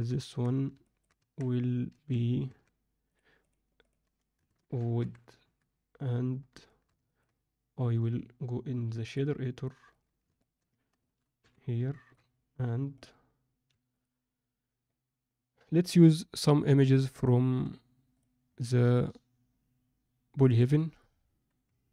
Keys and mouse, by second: 0.1 Tab, 0.8 middle click, 1.1 Tab, 1.9 a, 2.4 Tab, 3.9-6.1 drag, 4.9 o, 6.6 shift+middle click, 7.0 ctrl+alt+middle click, 9.1-10.0 drag.